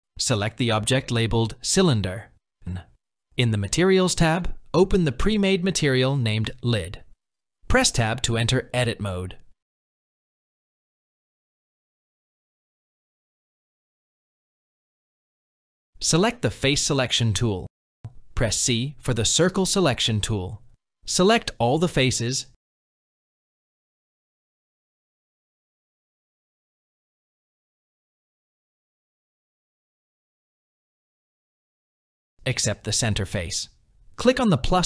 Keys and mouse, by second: 3.5 click, 4.5-6.0 drag, 8.2 Tab, 9.9 shift+click, 12.3 shift+click, 15.0 click, 15.7 c, 20.5-21.6 middle drag, 23.1 middle click, 25.7 middle click, 26.3 c, 27.1 middle click, 28.7 KP_1, 30.4 c.